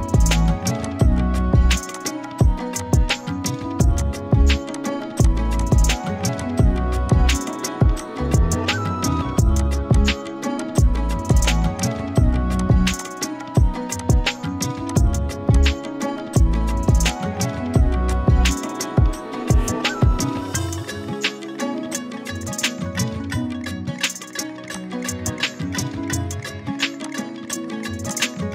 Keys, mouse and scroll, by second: 2.3 z, 2.7 click, 3.1 click, 5.0 z, 5.2 click, 5.5 z, 5.6 click, 12.3 z, 12.6 click, 12.8 z, 12.9 space, 13.0 click, 18.6 Down, 24.7 click, 25.7 ctrl+z, 27.0 click.